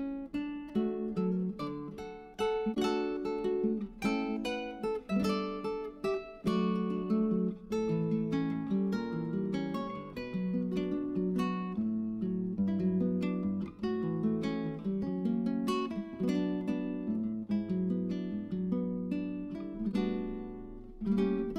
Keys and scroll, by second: 7.6-9.4 typing.